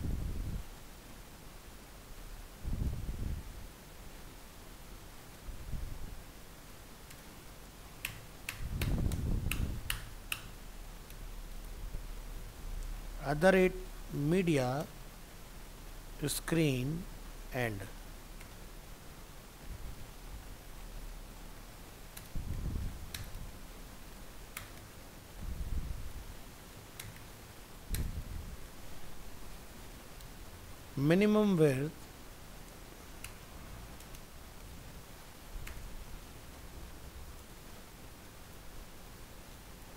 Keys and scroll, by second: 19.1 ctrl+z, 20.5 ctrl+x, 28.2 ctrl+v.